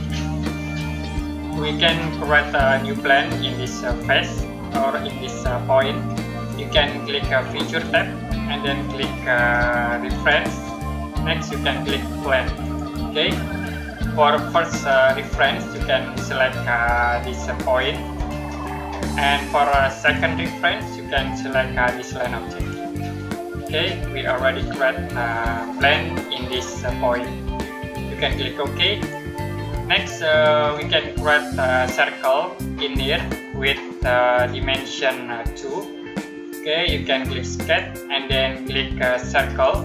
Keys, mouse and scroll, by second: 0.3-2.8 scroll down 1, 7.7 click, 12.5 click, 18.0 click, 22.5 click, 23.5-23.9 scroll down 1, 23.9 scroll up 1, 24.5 middle click, 28.7 click, 37.5 click.